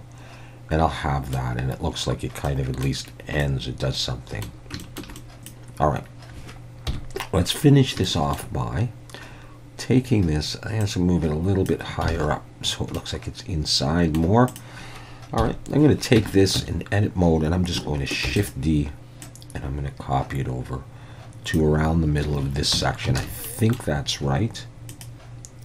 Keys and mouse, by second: 2.5-2.9 middle drag, 3.4-4.4 middle drag, 4.8 shift+middle drag, 5.2-6.9 middle drag, 5.5-6.9 drag, 6.9 KP_1, 8.1 shift+middle click, 10.9 click, 12.1 alt+a, 13.0-14.2 middle drag, 14.6-15.2 drag, 15.4 KP_1, 16.2 Tab, 16.6 a, 18.3 shift+d, 18.4-21.6 drag, 22.8 Tab, 23.2 alt+a, 23.5 middle drag.